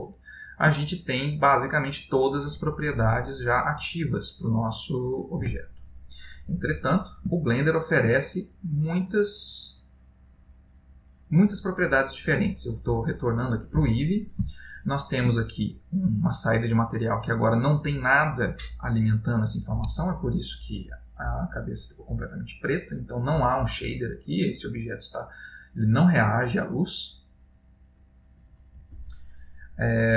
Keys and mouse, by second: 0.2 ctrl+middle click, 1.0 middle click, 4.2 click, 5.9 x, 6.9 middle click, 7.4 ctrl+middle click, 9.1 click, 14.0 middle click, 14.7 ctrl+middle click, 15.9 click, 16.1 click, 24.1 middle click.